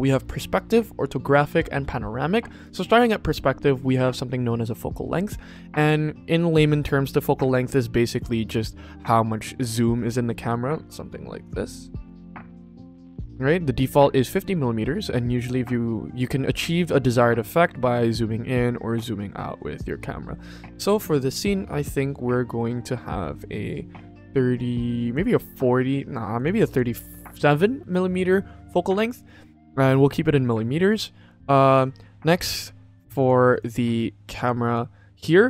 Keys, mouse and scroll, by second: 8.6-13.4 drag, 15.1-17.3 drag, 18.4-20.9 drag, 21.7 click, 24.1 click, 26.2 click, 26.4 click, 26.5 click, 29.5 click, 31.6 click, 32.3 click, 33.1 click, 33.4 click, 34.3 click, 34.5 click.